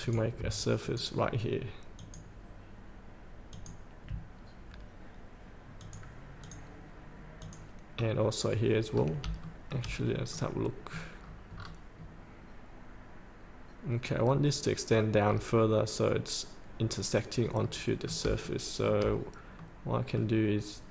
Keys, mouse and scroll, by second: 0.8 ctrl+click, 2.0 ctrl+click, 3.5 ctrl+click, 5.8 click, 7.9 scroll down 1, 8.9 scroll up 1, 9.4 shift+middle click, 10.1 scroll up 1, 10.3 middle click, 11.1 scroll down 2, 15.4 scroll up 1, 17.7 middle click, 18.5 shift+middle click, 19.6 middle click.